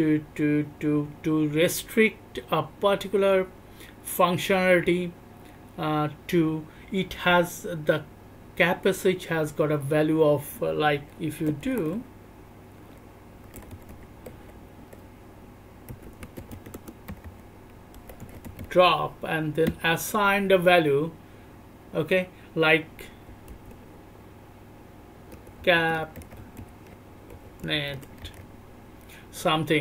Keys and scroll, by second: 11.4 /, 11.6 /, 13.9 /, 15.8-18.6 typing, 23.4 /, 25.3 /, 25.6 /, 27.3 /, 28.2 /.